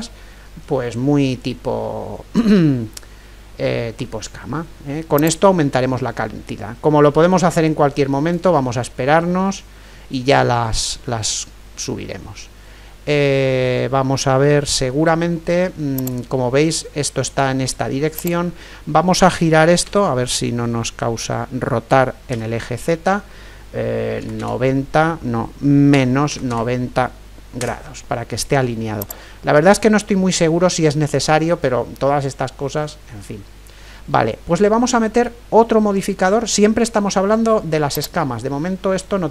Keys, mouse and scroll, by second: 5.2-8.8 drag, 8.8-13.1 middle drag, 14.9-17.9 middle drag, 16.0-17.9 right drag, 18.2-20.0 right drag, 19.9 r, 29.0-30.9 drag, 32.0-37.9 middle drag, 37.9-39.3 right drag.